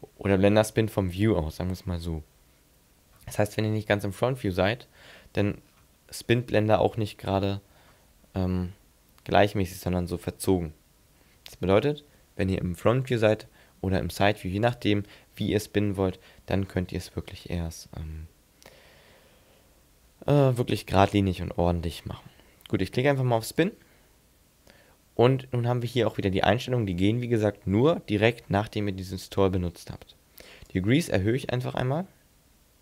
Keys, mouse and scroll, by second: 2.3-2.8 scroll down 3, 2.8-3.3 scroll up 4, 3.6 middle click, 4.6 shift+middle click, 5.2 scroll up 3, 5.6-6.1 scroll down 5, 6.3 middle click, 7.9 z, 8.6 middle click, 11.7 ctrl+z, 13.1 right click, 15.7 shift+middle click, 16.6-17.0 scroll up 1, 17.0-17.3 scroll down 1, 17.3 scroll up 2, 23.6 click, 30.7 click.